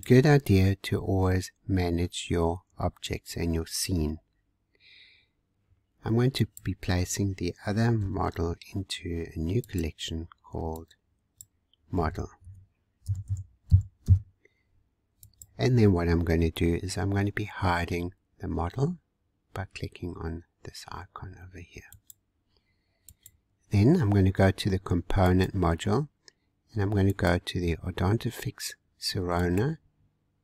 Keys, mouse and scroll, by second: 6.4 click, 8.0 m, 21.9 click, 23.0 click, 25.2 click, 27.2-30.1 drag.